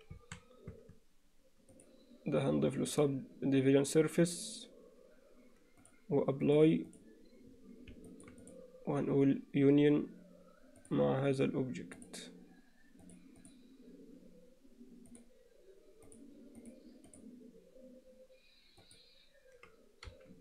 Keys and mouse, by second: 0.2 a, 0.8 Tab, 1.8-4.4 drag, 6.6-7.0 drag, 8.1 alt+middle click, 13.6-15.2 drag, 16.1 drag, 18.8 click.